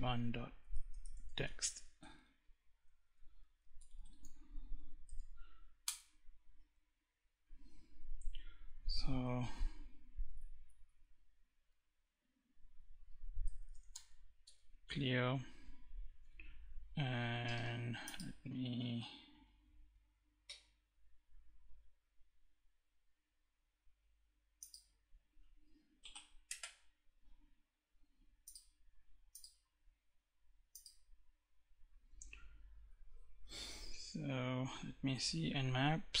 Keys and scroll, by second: 0.0-1.3 typing, 2.3-4.3 typing, 5.1 Return, 8.5 Up, 11.2 Down, 12.5-13.7 typing, 13.7 Return, 34.9-36.2 typing.